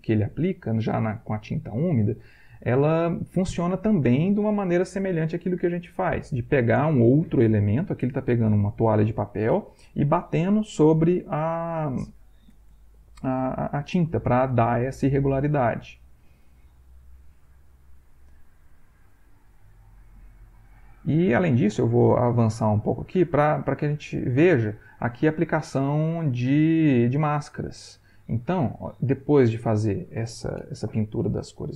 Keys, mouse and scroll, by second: 17.8 click, 19.5 click, 21.4 click, 22.3 click, 23.8 click, 26.4 click, 27.1 click.